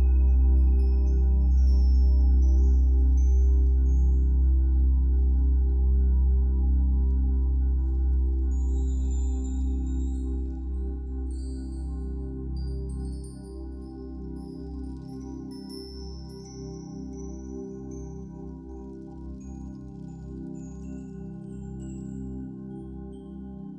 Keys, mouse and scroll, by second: 9.5-10.1 scroll down 2, 10.1-18.4 shift+middle drag, 10.6 scroll down 1, 11.3 scroll up 1, 16.4 scroll up 2, 17.2 scroll up 2, 18.4-20.5 drag, 20.3 scroll down 2, 20.5-23.7 middle drag, 22.1 scroll down 1, 22.5-22.9 scroll up 1, 23.1 scroll up 1, 23.6 scroll up 1.